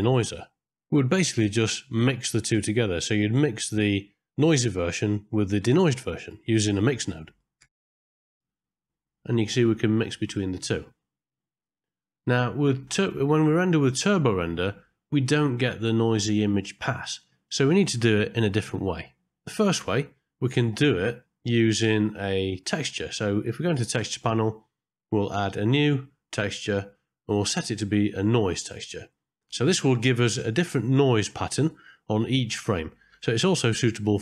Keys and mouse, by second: 1.2 click, 1.9 shift+a, 6.9-8.4 drag, 9.5 click, 11.2 click, 12.2 click, 14.0 drag, 15.3 middle click, 27.4-28.8 drag.